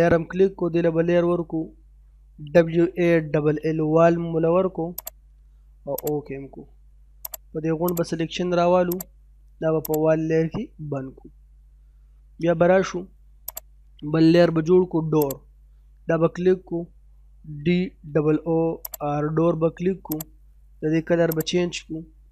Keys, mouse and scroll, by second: 1.5-2.5 typing, 4.9 typing, 5.0 click, 13.5 click, 16.7-18.1 typing, 18.8 click.